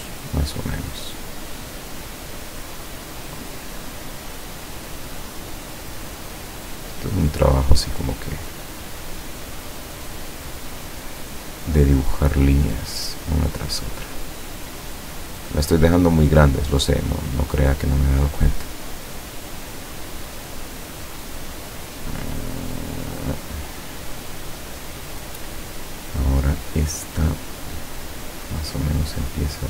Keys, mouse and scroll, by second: 2.6 click, 3.8-4.5 drag, 6.1 click, 7.7 click, 8.3 click, 9.9 click, 12.9 click, 13.7-14.3 drag, 15.2 click, 16.9 click, 18.0-19.3 drag, 19.5 click, 23.3 click.